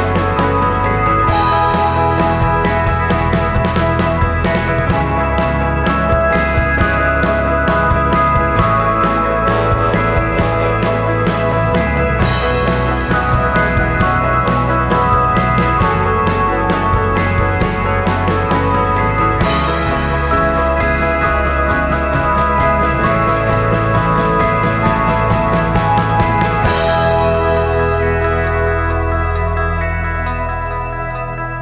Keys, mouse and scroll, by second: 2.5 scroll down 1, 5.8-7.8 drag, 10.0-11.2 drag, 11.6 alt+click, 12.3 scroll down 2, 12.5 alt+click, 13.1 scroll up 2, 13.9 scroll up 1, 13.9 scroll down 1, 15.0-19.4 drag, 20.2 scroll down 1, 20.5 scroll up 2, 20.9 alt+click, 22.4 scroll down 2, 24.0-25.1 drag, 25.3 scroll up 1, 25.9-28.6 drag, 28.8 alt+click, 30.2-31.6 alt+drag.